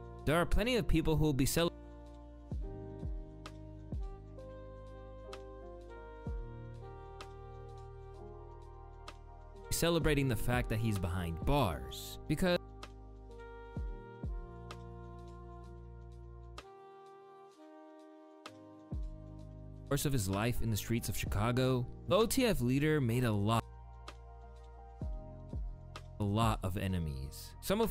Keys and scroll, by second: 1.3 space, 19.6 space, 23.2 space, 25.6 d, 25.9 space.